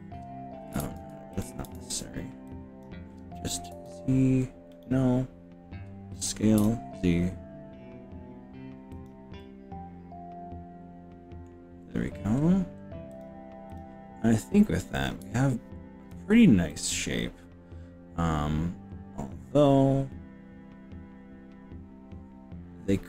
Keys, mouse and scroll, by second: 0.8 ctrl+z, 1.4 click, 1.8 ctrl+z, 2.5 click, 3.8 z, 6.2 s, 6.6 z, 9.0 click, 9.4-11.5 middle drag, 12.0-13.0 scroll down 4, 13.2 click, 13.8 click, 15.2 z, 16.7-23.0 middle drag.